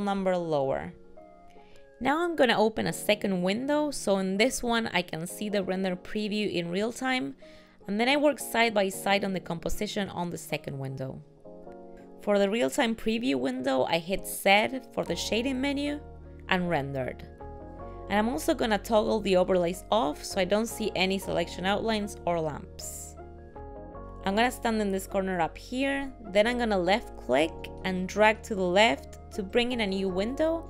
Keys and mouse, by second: 1.3 click, 1.7 click, 1.9-3.8 click, 2.1 click, 2.1 click, 2.4 click, 2.4 click, 2.6 click, 2.8 click, 3.1 click, 3.2 click, 3.5 click, 3.7 click, 3.9 click, 4.1 click, 4.3 click, 4.4 click, 4.7 click, 5.7 g, 25.8 click.